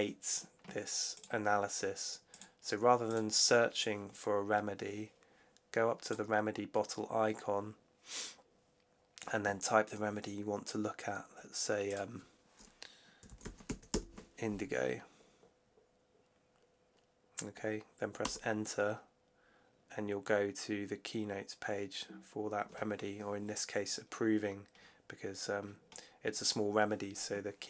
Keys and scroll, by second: 13.0-13.8 typing, 18.1 Return.